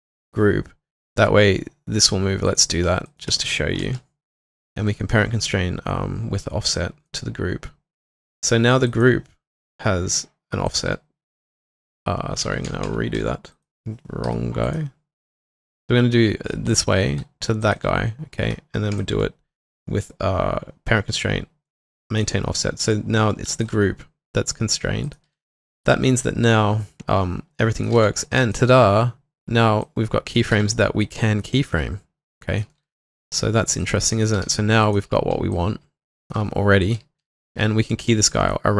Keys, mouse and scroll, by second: 2.9 ctrl+click, 3.1 shift+click, 10.9 w, 12.2-13.3 typing, 15.2 double click, 17.6 ctrl+click, 18.9 typing, 19.0 shift+click, 23.5 shift+click, 25.2 typing, 27.7-28.4 typing, 30.5 typing, 32.4-33.2 typing, 34.0 double click, 35.0 typing, 36.4-37.2 typing.